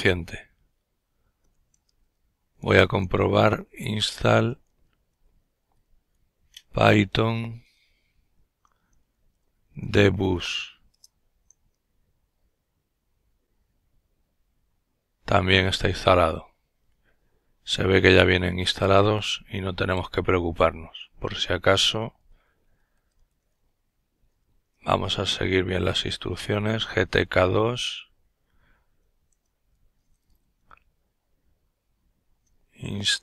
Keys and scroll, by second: 0.2-4.5 typing, 5.6-9.8 typing, 20.5-24.8 typing, 25.9 typing, 28.2 typing, 29.7-30.6 typing, 31.9-33.2 typing.